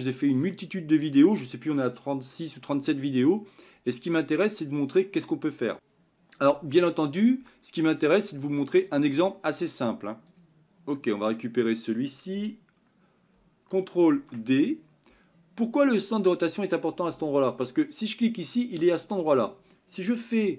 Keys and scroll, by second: 15.1 ctrl+d.